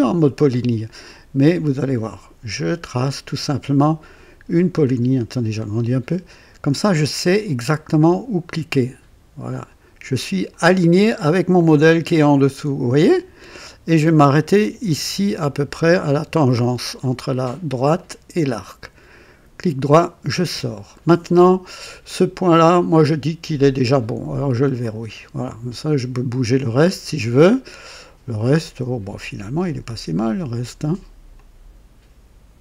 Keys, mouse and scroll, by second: 2.5 click, 4.8 scroll up 2, 7.4 click, 10.4 click, 12.9 click, 17.9 click, 19.8 right click, 20.9 right click, 23.5 click, 24.8 click, 28.6-29.8 drag, 30.6 click, 31.3-32.6 drag.